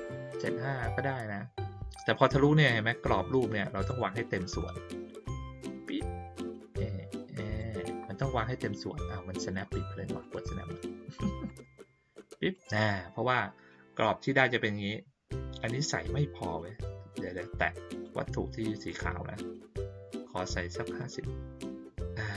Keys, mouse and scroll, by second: 3.8 click, 4.5 click, 10.2 click, 11.4 click, 17.9 click, 20.0 right click, 20.8 click.